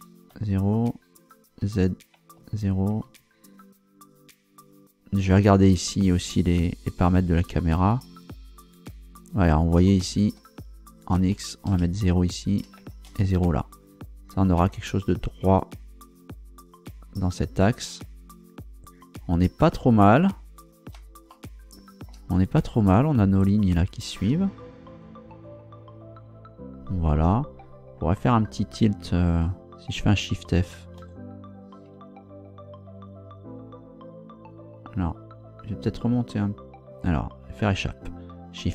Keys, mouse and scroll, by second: 0.3 KP_0, 1.6 z, 2.3 0, 3.0 Return, 7.2-8.7 drag, 10.8 shift+click, 11.3 shift+0, 11.6 shift+Return, 12.4 shift+click, 12.8 shift+0, 13.0 shift+Return, 17.9-18.2 scroll down 2, 20.0-20.6 scroll up 4, 21.3 shift+middle click, 31.0 shift+f, 37.6 Escape.